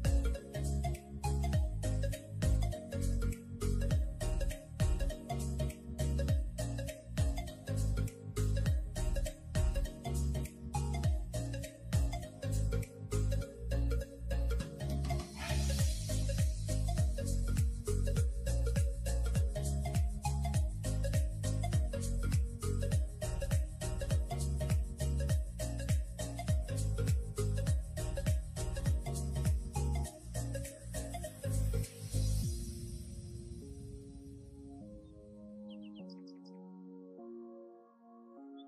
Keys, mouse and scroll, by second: 0.6 shift+a, 4.0 s, 4.9 g, 6.0 s, 6.6 scroll up 2, 6.8 g, 11.1 1, 11.5 click, 12.3 1, 12.8 click, 13.1 1, 13.6 Tab, 13.9 click, 14.5 g, 15.6 click, 16.6 1, 16.8 click, 17.2 g, 18.8 click, 19.3 g, 21.0 middle click, 21.5 alt+z, 21.8 scroll down 3, 22.1 Tab, 22.5 click, 22.7 click, 24.6 click, 25.2 middle click, 25.5 scroll down 2, 25.7 middle click, 26.2-26.6 scroll down 1, 26.6-28.2 drag, 29.3-30.5 scroll up 3, 30.5-31.0 drag, 32.1 click, 33.5 middle click, 33.7 scroll up 3, 33.9 click, 34.4 click, 34.6-35.5 middle drag, 35.5 KP_3, 35.9 scroll up 3, 36.1-36.8 shift+middle drag, 36.8 Tab, 37.0-37.7 scroll up 2, 37.7 alt+z, 38.1-38.6 scroll down 3.